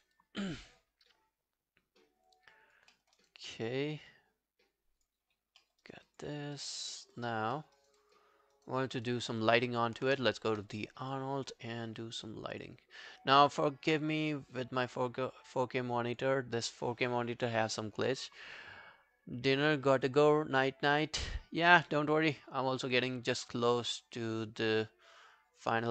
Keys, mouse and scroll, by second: 0.2 alt+click, 3.0 alt+middle click, 3.2 alt+right click, 3.4 alt+click, 5.3-5.6 alt+scroll down 4, 5.6 alt+middle click, 5.9 alt+right click, 6.1 alt+click, 6.6 alt+middle click, 6.9 alt+scroll down 3, 7.2 alt+click, 7.6 alt+middle click, 7.8 alt+right click, 8.0 alt+click, 8.4-9.1 alt+scroll down 5, 8.6 alt+right click, 9.1 alt+click, 9.3 alt+right click, 9.6 alt+click, 11.1 double click.